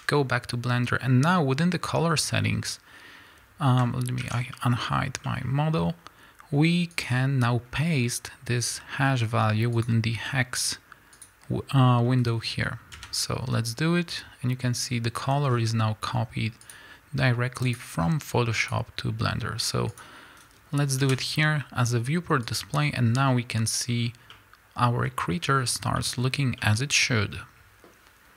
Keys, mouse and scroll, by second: 0.0-13.0 middle drag, 4.2 alt+h, 21.0 click, 23.2-28.1 middle drag, 23.9-24.3 scroll up 2, 25.6-26.0 scroll up 2, 26.2-26.6 scroll down 2, 28.1 KP_Enter, 28.2-28.3 drag.